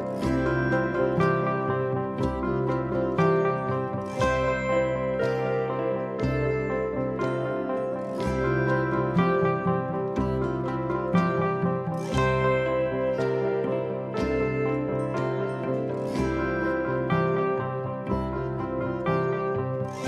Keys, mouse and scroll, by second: 3.1-5.7 middle drag, 6.8 click, 8.0-9.6 scroll up 2, 9.6-10.4 scroll down 2, 10.4-10.9 scroll down 1, 10.9 click, 13.1-14.5 middle drag, 15.9-18.3 drag.